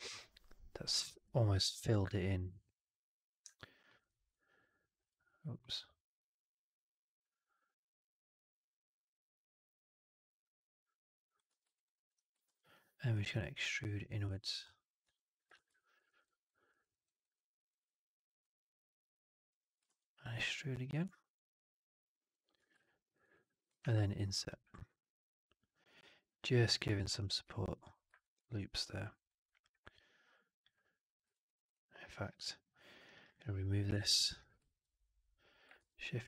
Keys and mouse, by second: 4.9 alt+click, 11.5 w, 11.6 alt+right click, 11.8 alt+click, 12.3 ctrl+e, 14.5 click, 14.9 w, 15.4 shift+x, 15.6 alt+click, 15.9 alt+middle click, 16.1 alt+right click, 16.6 alt+click, 16.8 alt+middle click, 16.9 alt+right click, 17.2 alt+click, 18.3-19.4 drag, 19.7 ctrl+e, 20.6-22.2 drag, 22.4 w, 22.7 alt+click, 23.1 right click, 23.7 shift+Tab, 28.1 alt+right click, 28.3 alt+click, 29.1 alt+right click, 29.5-30.5 alt+drag, 31.3 2, 31.3 click, 31.5 click, 32.9 click, 33.1 click, 34.0 ctrl+BackSpace, 35.6 shift+f.